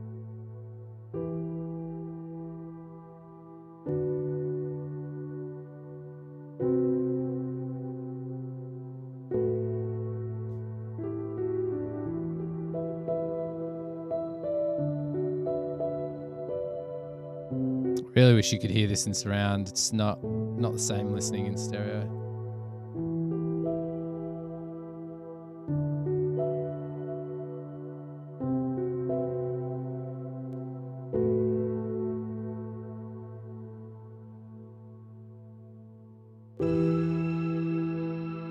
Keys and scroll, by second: 0.7 Return, 28.8 super+=, 32.9 super+=.